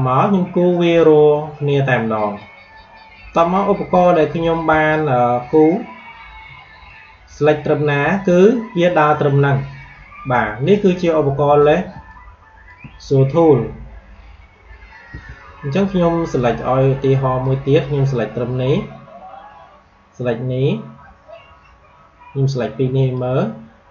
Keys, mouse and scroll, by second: 4.6 a, 5.4-9.3 drag, 11.8 space, 12.0 click, 12.3 space, 15.0 q, 15.6 space, 15.8 click, 16.1 space, 17.3-23.9 drag.